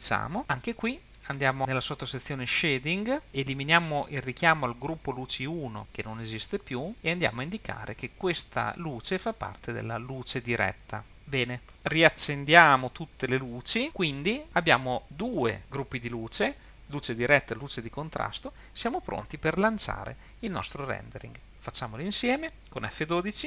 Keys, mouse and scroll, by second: 6.9-11.0 drag, 12.1 click, 13.1 click, 15.0 click, 15.0-15.6 scroll down 8.